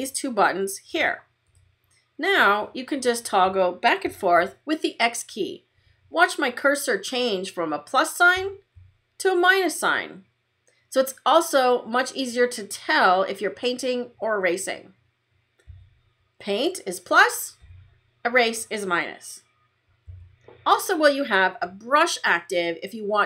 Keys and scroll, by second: 8.2 x, 15.6 x, 20.0 x.